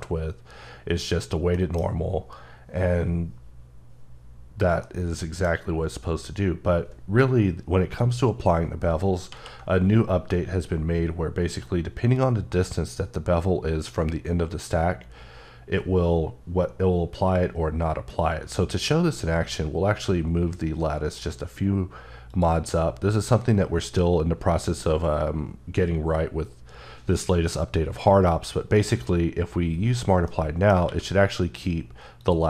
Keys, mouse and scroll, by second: 1.3 middle click, 4.6 middle click, 8.6 ctrl+middle click, 9.1 ctrl+z, 19.7-21.2 drag, 22.1 click, 30.1 middle click, 30.7 q, 32.0 click.